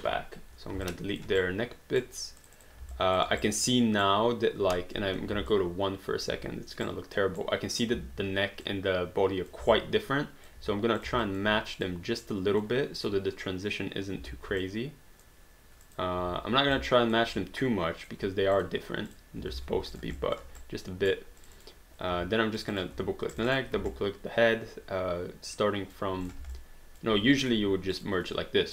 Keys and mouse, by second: 0.0 Delete, 0.9 alt+click, 1.4 right click, 2.4 click, 2.9 alt+click, 3.4 right click, 5.1 1, 5.5 alt+click, 6.9 right click, 7.7 click, 8.0 w, 8.7 click, 9.8 alt+click, 11.0 click, 11.2 alt+click, 11.8 click, 13.0 click, 14.6 click, 15.9 click, 16.2 w, 17.1 alt+click, 17.6 click, 19.5 alt+d, 20.0 click, 20.2 alt+click, 20.6 right click, 21.4 click, 22.1 q, 22.6 click, 23.3 shift+click, 24.0 alt+click, 26.3 click, 26.6 alt+click, 27.4 click, 28.0 shift+click.